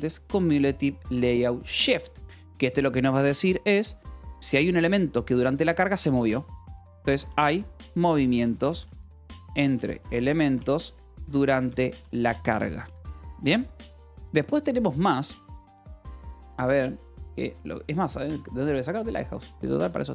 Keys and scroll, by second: 0.9 shift+c, 1.6 l, 2.2 space, 7.0-13.9 typing.